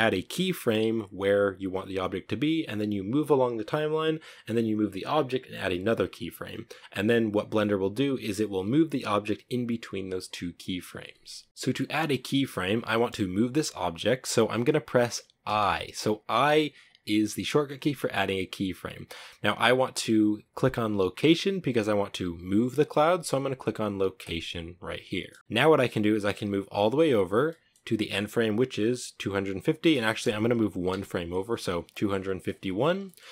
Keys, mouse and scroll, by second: 25.5-30.1 drag, 30.1 Right, 32.2-33.3 shift+middle drag.